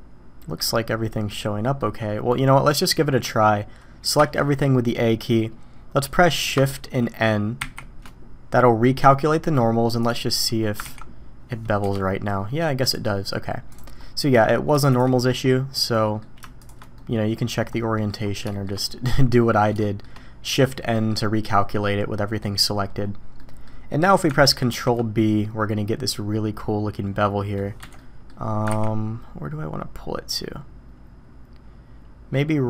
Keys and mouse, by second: 0.3 drag, 1.3-1.8 drag, 2.5 drag, 4.2 a, 7.6 shift+n, 9.4 click, 10.8 ctrl+b, 12.9-13.8 right drag, 14.0 middle click, 14.9 shift+middle click, 15.5 middle click, 16.9-17.5 middle drag, 17.9 middle click, 18.5 shift+middle click, 19.1 middle drag, 19.8 shift+middle drag, 20.9 middle click, 23.4 middle click, 24.7 ctrl+b, 27.9 middle click, 28.7 ctrl+b.